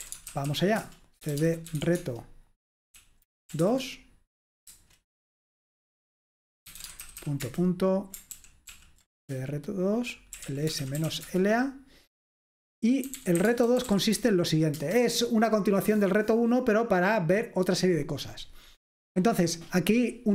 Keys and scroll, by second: 0.0-2.3 typing, 3.0 Right, 3.4-5.2 typing, 6.5-7.7 typing, 8.4 ctrl+p, 8.7 ctrl+p, 9.3 Return, 10.2-11.6 typing, 12.9-14.4 typing, 14.8 Return.